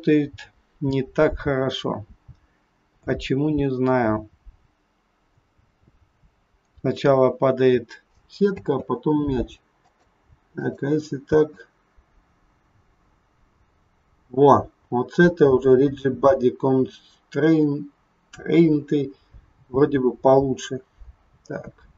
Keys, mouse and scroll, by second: 8.6 space, 9.8 click, 10.6 click, 11.2 space.